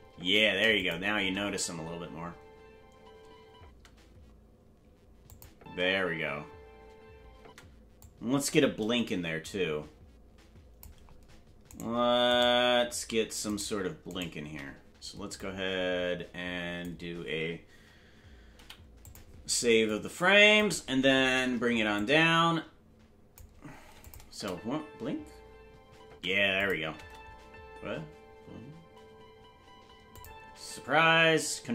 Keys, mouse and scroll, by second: 0.3 space, 0.7 click, 1.1 space, 3.8 space, 5.3 click, 5.5 space, 8.0-10.8 drag, 8.0 space, 11.9 right click, 15.3-16.8 drag, 18.5 i, 19.8 click, 21.9-23.4 drag, 24.0 click, 24.3 space, 26.4 space, 26.5 click, 26.8 space, 30.1 click.